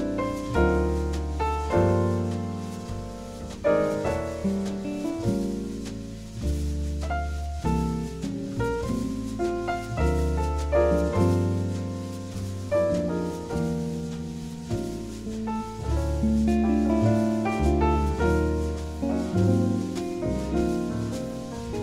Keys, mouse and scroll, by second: 0.4 w, 3.4 w, 4.9 w, 6.3 w, 8.3 w, 10.0 s, 11.8-13.6 drag, 13.2 KP_1, 15.3 KP_0, 16.6-17.8 right drag, 17.8 middle click, 18.4-20.6 drag, 19.2 middle click, 19.4-20.6 right drag, 20.5-21.8 middle drag.